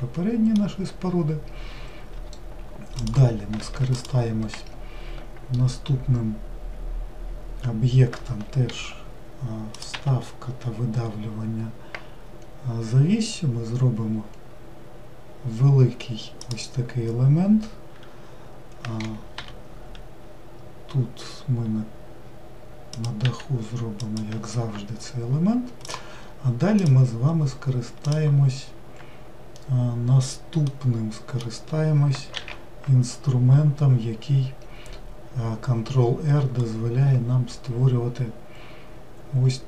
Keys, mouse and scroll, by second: 4.0 ctrl+shift+click, 26.0 click, 26.9 click, 28.2 click.